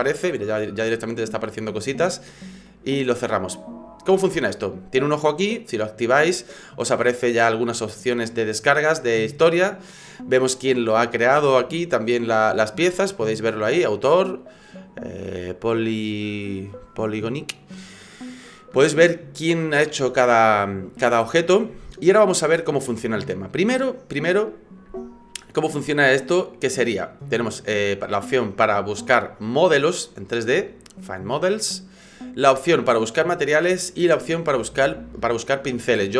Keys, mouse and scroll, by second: 4.1 click, 5.6 click, 28.6 click.